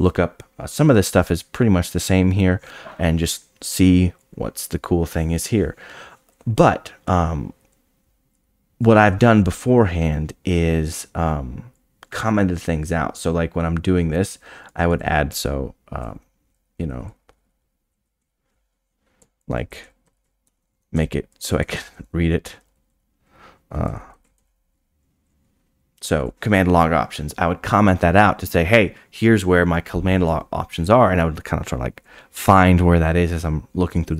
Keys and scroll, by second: 18.2 i.